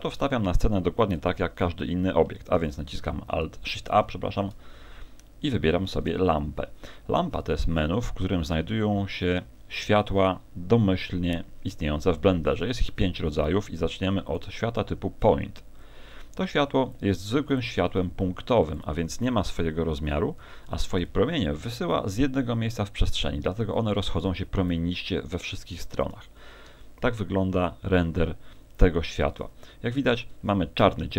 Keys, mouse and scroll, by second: 1.2 KP_1, 1.6 z, 2.6 shift+a, 15.8 click, 17.6 click, 19.6 KP_1, 20.4 KP_3, 22.8 click.